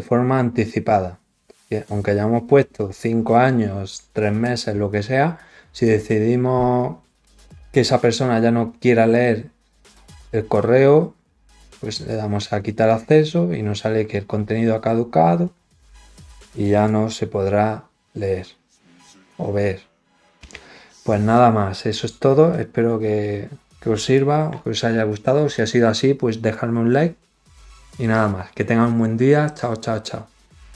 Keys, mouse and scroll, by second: 12.8 click.